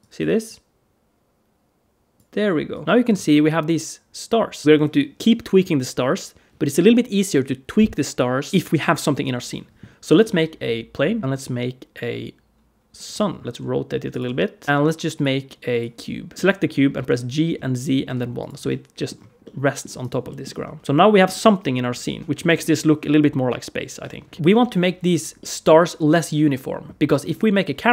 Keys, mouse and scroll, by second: 0.3 click, 2.5 click, 2.9 scroll down 2, 3.1 middle click, 10.1 shift+a, 11.2 middle click, 11.2 s, 13.4 alt+shift+z, 13.4 middle click, 13.4 r, 14.1 g, 14.6 scroll up 2, 14.6 shift+a, 16.3 middle click, 16.3 scroll up 1, 16.3 g, 16.9 g, 18.5 middle click, 19.0 scroll down 1, 19.3 middle click, 19.8 click, 20.2 middle click, 20.5 s, 20.8 alt+a, 20.8 middle click, 21.9 alt+shift+z, 24.3 middle click, 24.3 click, 25.2 middle click, 26.9 middle click.